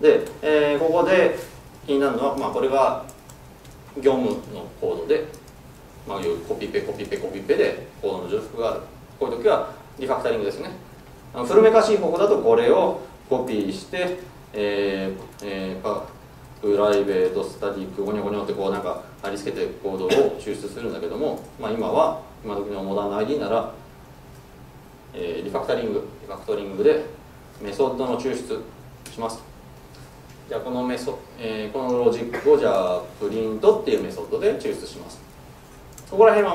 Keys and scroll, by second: 12.8 super+c, 18.5 Escape, 24.4 ctrl+alt+shift+super+t.